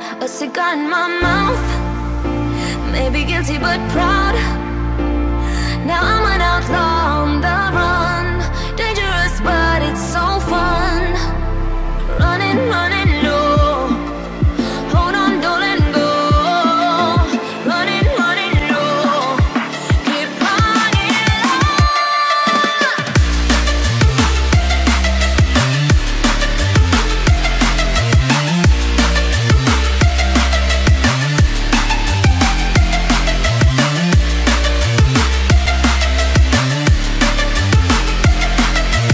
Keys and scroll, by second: 13.6 ctrl+0, 26.6 BackSpace, 32.7 Return.